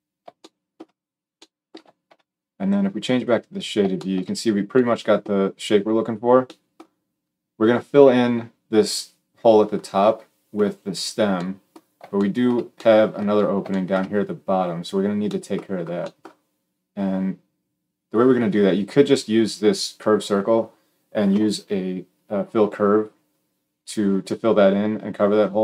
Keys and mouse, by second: 3.1-25.6 middle drag.